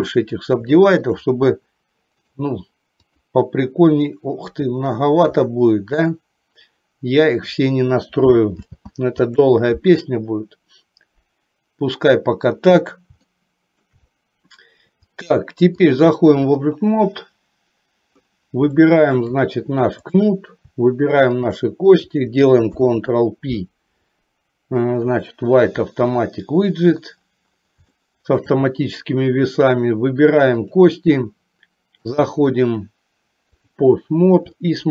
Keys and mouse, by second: 0.8 shift+middle click, 2.4 right click, 8.6 ctrl+z, 13.4 shift+middle click, 15.9 click, 18.7 shift+middle click, 21.5 shift+click, 28.0 shift+middle click, 32.1-33.9 drag, 34.6 shift+middle click.